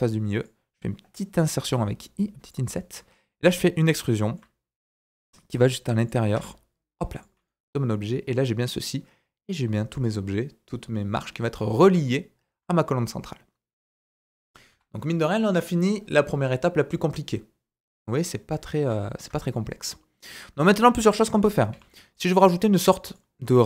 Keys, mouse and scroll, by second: 1.6 i, 2.7-3.8 right drag, 2.7 middle click, 3.3-3.8 scroll down 2, 3.8 shift+click, 3.9 shift+middle click, 4.4-6.3 right drag, 5.1 e, 6.3 Tab, 6.5-7.1 scroll down 3, 7.1 click, 7.4 middle click, 8.8 right click, 9.2 right click, 9.4 right click, 9.8-12.0 right drag, 11.7 scroll down 1, 12.0-12.6 shift+middle drag, 14.7 KP_1, 18.2-18.6 scroll down 2, 18.6 scroll up 1, 19.0 shift+middle click, 20.6 click, 21.7 g.